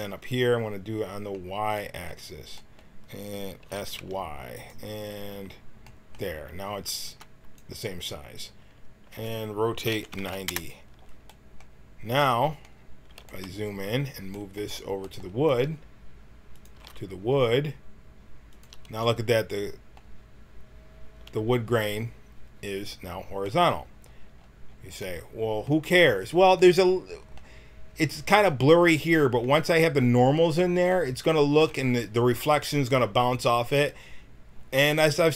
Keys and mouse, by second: 0.6-7.2 drag, 3.6 s, 7.0 b, 9.1-12.0 right drag, 9.8 r, 13.5-15.4 middle drag, 15.4 g, 16.7 g, 20.2-22.7 middle drag, 24.0 middle click, 26.1 middle click, 28.3 click.